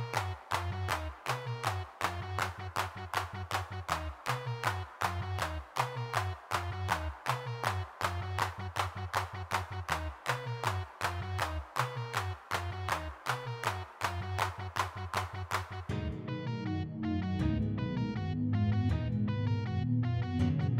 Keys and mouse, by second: 0.0 3, 0.2 f, 0.4 click, 1.2-2.6 middle drag, 2.7 middle click, 3.5-4.7 middle drag, 6.3-7.5 middle drag, 7.5 click, 8.3 click, 9.5 click, 12.5 f, 12.9 g, 13.3 f, 14.9 ctrl+z, 15.9 f, 17.5 middle click, 17.8 3, 18.2 f, 18.5 click, 18.6 middle click, 19.7-20.7 middle drag.